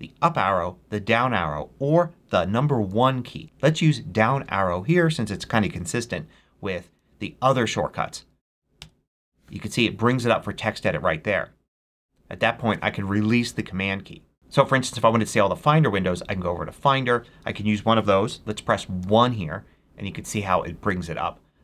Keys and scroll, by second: 8.7 super+Down, 15.1 super+Tab, 18.9 super+1.